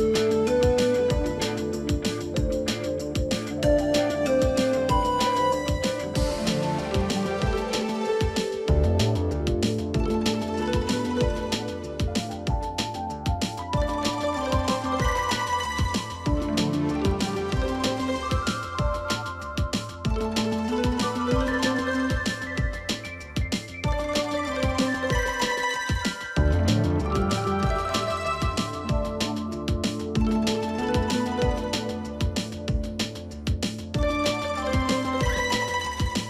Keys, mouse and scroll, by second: 0.5 double click, 27.7 double click.